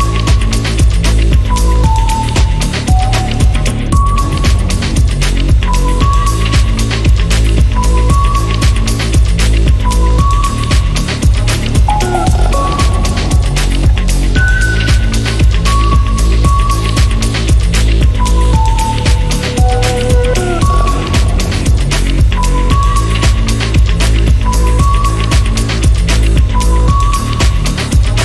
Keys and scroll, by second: 17.8 1, 18.5 Return.